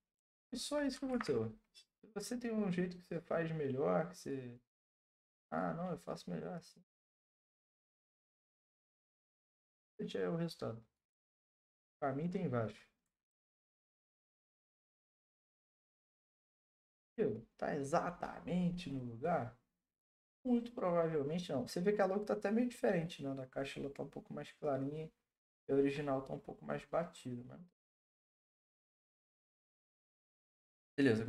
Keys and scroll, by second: 0.1 Return, 1.1 ctrl+t, 7.7 Return, 8.8 ctrl+t, 11.1 Return, 13.0 Right, 13.3 Right, 13.5 Right, 13.6 Right, 13.9 Right, 14.1 Right, 14.2 Right, 14.5 Right.